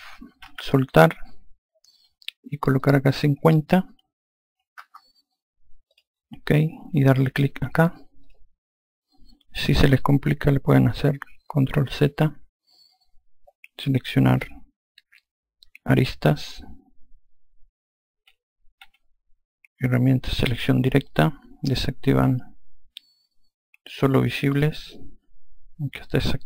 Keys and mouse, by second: 2.7 click, 4.6 KP_5, 8.2 click, 11.8 ctrl+z, 18.8 2, 20.4 4, 24.5 click.